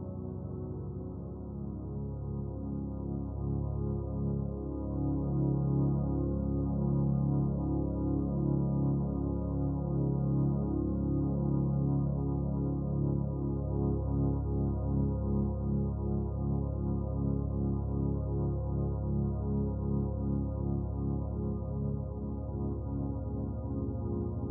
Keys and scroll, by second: 0.9 ctrl+z, 4.6 ctrl+z, 8.5 ctrl+z, 12.1 ctrl+z, 18.9 ctrl+z.